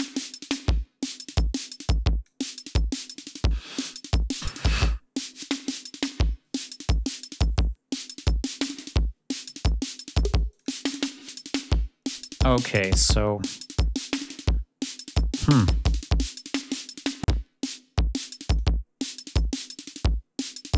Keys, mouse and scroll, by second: 1.0-2.3 drag, 7.4-10.7 drag, 18.3 click, 19.1 click, 20.2 click.